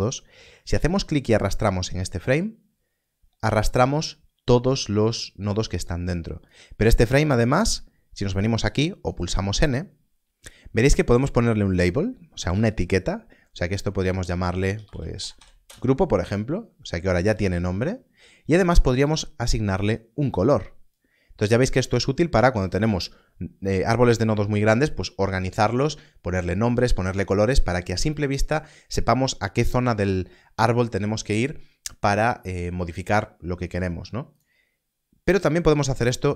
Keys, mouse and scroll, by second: 0.8-1.7 scroll down 1, 9.0 click, 14.0 click, 14.2 shift+g, 15.6 Return, 18.9 Return.